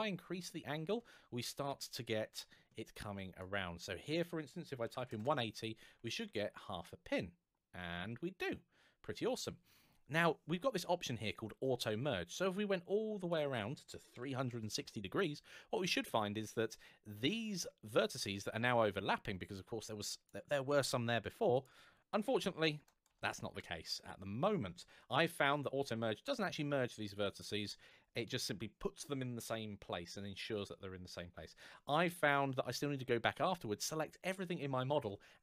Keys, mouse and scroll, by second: 4.7 KP_1, 4.8 KP_8, 4.9 KP_0, 5.0 Return, 6.0-6.7 scroll up 1, 6.7 middle click, 12.2 click, 13.9 KP_3, 14.1 KP_6, 14.3 KP_0, 14.6 Return, 19.2 click, 21.3 click, 22.1 KP_3, 22.4 KP_6, 22.6 KP_0, 22.9 Return.